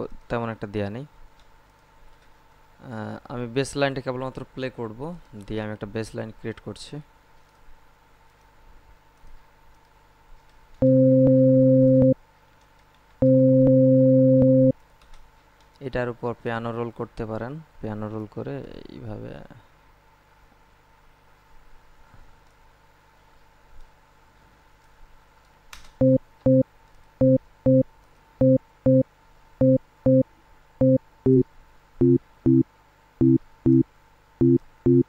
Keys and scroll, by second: 10.4 space, 12.4 space, 14.9 space, 25.5 space.